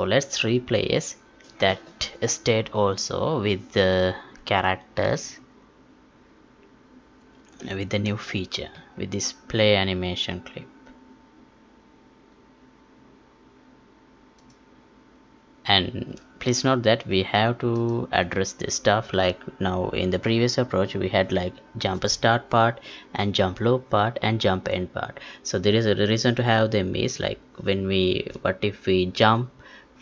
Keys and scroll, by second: 7.6 alt+Tab.